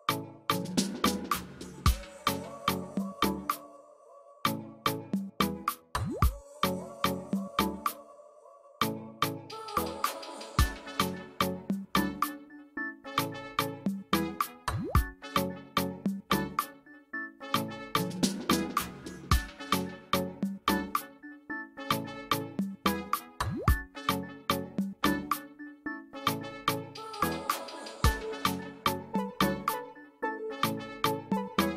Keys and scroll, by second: 23.5 space, 24.3 alt+space.